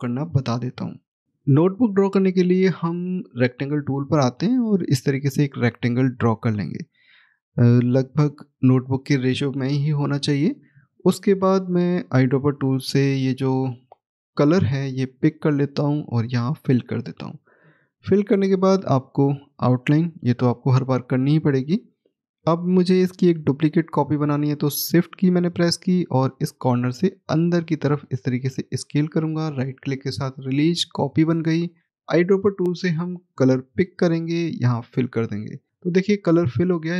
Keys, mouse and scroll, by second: 4.0 click, 12.6 scroll up 1, 14.2 click, 14.7 middle click, 15.3-16.1 scroll down 1, 16.1 click, 19.6 right click, 21.0 right click, 21.0-24.0 scroll up 1, 26.5 shift+click, 28.7 shift+right click, 32.8 click.